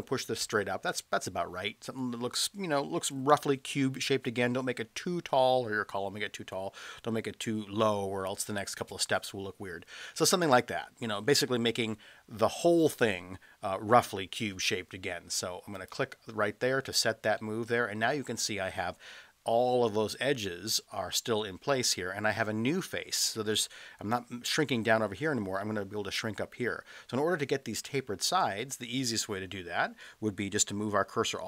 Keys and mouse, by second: 15.7 click, 17.4-18.5 middle drag, 21.4-21.8 middle drag.